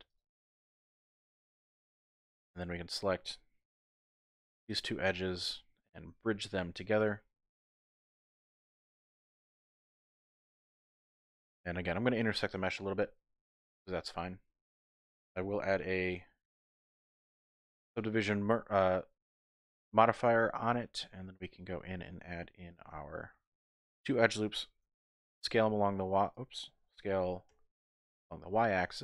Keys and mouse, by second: 0.1 click, 0.9 Tab, 1.1 middle click, 3.5 2, 4.0 alt+click, 4.7 alt+shift+click, 5.2-7.0 drag, 7.0 typing, 7.5 middle click, 8.1 click, 8.4 middle click, 8.8 Tab, 10.3 g, 10.3 y, 13.8 click, 14.2 middle click, 16.0 ctrl+2, 17.1-18.2 drag, 20.3 middle click, 20.7 Tab, 21.3 middle click, 22.6 ctrl+r, 23.8 click, 25.3 s, 25.4 t, 26.2 click, 26.9 s, 27.5 y.